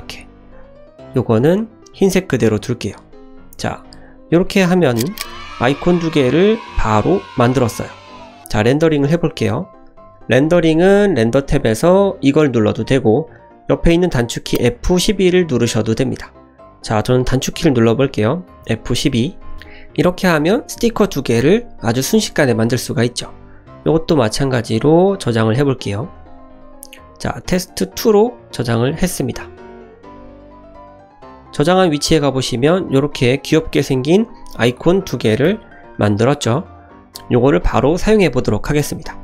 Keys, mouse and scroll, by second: 0.4 click, 1.0 click, 1.3 middle click, 2.3 middle click, 3.0 click, 3.5 KP_0, 4.0-4.4 scroll down 2, 4.4 shift+middle drag, 4.7-5.0 middle drag, 5.0 scroll down 1, 5.4 shift+middle click, 5.7 middle click, 6.5-6.9 scroll up 1, 6.9-7.6 scroll down 1, 7.8 click, 11.1 click, 11.5-16.6 drag.